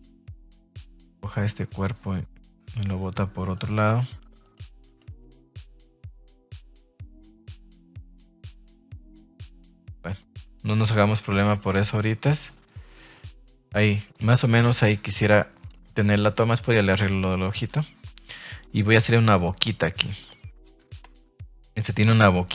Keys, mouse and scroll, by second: 1.9-2.5 middle drag, 3.5 click, 5.1 click, 5.6 click, 7.9 click, 8.7 middle click, 9.6 middle click, 10.0 middle click, 10.5 middle click, 11.0 r, 11.4 click, 11.6 g, 12.0 click, 12.4 a, 12.8 middle drag, 13.4 middle drag, 13.8 shift+middle click, 14.1 middle click, 14.4 shift+middle click, 16.0 middle click, 16.3 middle click, 16.6 g, 17.4 click, 17.6 a, 17.7 a, 18.3 middle drag, 18.9 middle click, 19.2 shift+middle drag, 19.7 middle click, 20.1 shift+middle click, 20.8 Tab, 21.1-21.6 shift+middle drag, 21.7 shift+middle click, 22.4 shift+middle click.